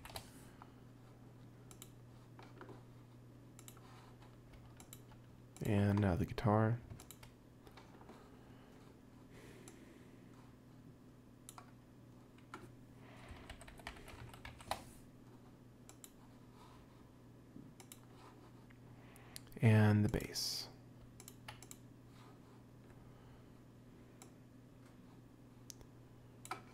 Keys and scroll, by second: 0.0-0.5 typing, 13.3-15.0 typing.